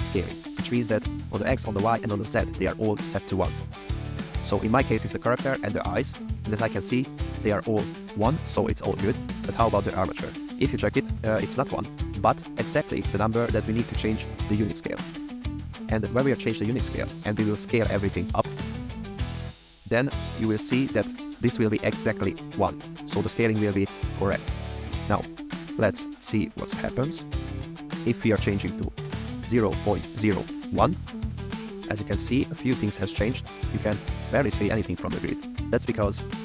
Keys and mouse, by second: 5.4 click, 6.4 click, 9.3 click, 26.9-30.8 drag.